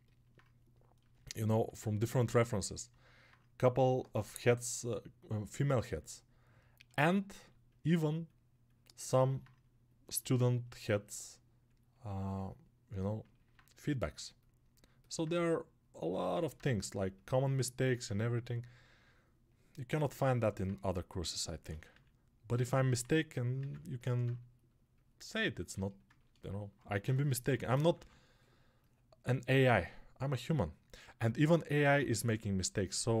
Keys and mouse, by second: 23.0-26.0 right drag, 26.0 ctrl+alt+click, 26.5-33.2 alt+shift+right drag.